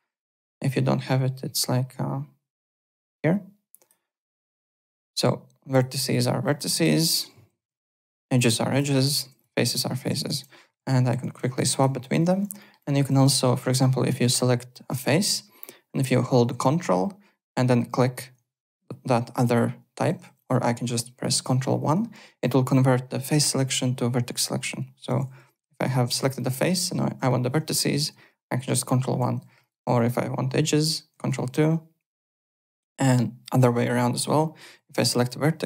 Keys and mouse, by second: 0.3 click, 3.8 click, 4.6 click, 5.7 click, 6.7 ctrl+z, 7.6 2, 7.9 click, 8.8 ctrl+z, 9.2 3, 9.3 click, 10.1 ctrl+z, 10.4-12.5 typing, 12.5 alt+middle click, 12.8 alt+click, 13.6 3, 14.2 click, 17.9 ctrl+click, 19.9-20.7 typing, 20.4 click, 21.7 ctrl+1, 25.5 3, 25.7 click, 26.3 click, 26.7 ctrl+z, 27.9 ctrl+1, 29.1-29.9 typing, 29.6 click, 31.1 ctrl+2, 34.7 1, 35.0 click.